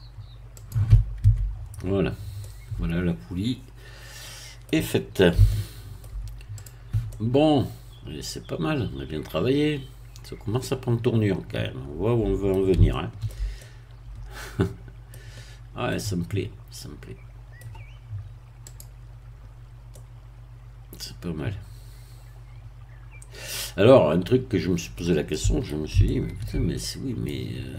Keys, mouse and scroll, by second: 0.5 click, 1.1 Tab, 1.5-2.3 scroll down 3, 2.3-4.8 middle drag, 5.4-6.4 shift+middle drag, 6.5 click, 7.0-12.7 middle drag, 12.9-17.9 shift+middle drag, 18.6 click, 19.5-19.9 scroll up 1, 19.9-25.8 middle drag, 26.0-27.7 shift+middle drag.